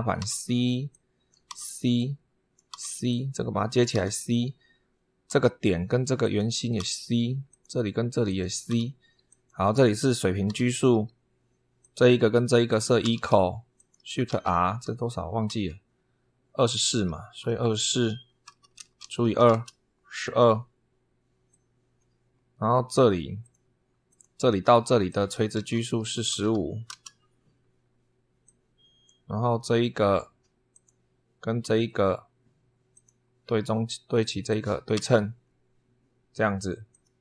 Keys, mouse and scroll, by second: 0.0 c, 0.7 click, 1.2 c, 1.7 click, 2.5 c, 2.8 click, 3.7 c, 5.0 click, 6.0 click, 6.5 c, 7.2 click, 8.0 click, 8.4 c, 9.0 click, 10.2 h, 11.6 click, 12.4 click, 12.8 e, 13.5 click, 14.0 shift+r, 16.9 super+3, 18.0-19.5 typing, 21.3 click, 22.6 click, 23.2 click, 23.8 click, 24.8 click, 25.3-26.8 typing, 28.2 click, 30.5 click, 32.7 click, 34.2 click, 34.7 s, 36.7 click.